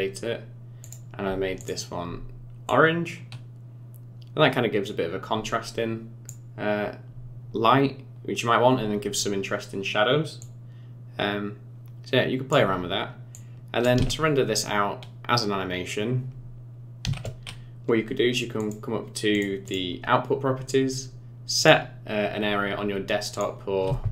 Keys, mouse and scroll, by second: 1.6 click, 10.4 click, 13.3 click, 13.9 space, 17.0 space, 18.6 click, 19.3 click, 19.6 click, 21.5 click.